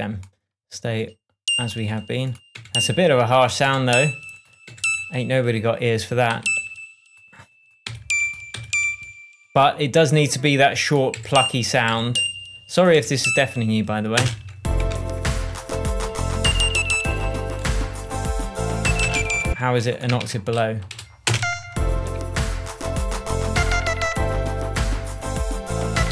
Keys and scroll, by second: 2.9 Left, 4.0 Left, 6.7 Right, 8.2 Right, 11.5 Left, 13.3 Left, 14.5 space, 15.2 shift+space, 15.3 shift+Tab, 19.4 space, 20.6 super+a, 21.2 shift+super+a, 21.3 shift+super+Down, 21.6 shift+space.